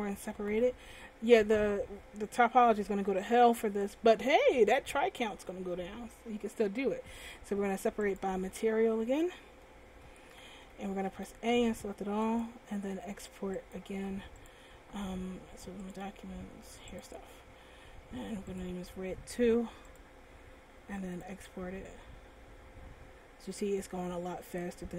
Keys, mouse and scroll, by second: 0.6 p, 10.0 Tab, 10.8 a, 11.3 a, 12.5 click.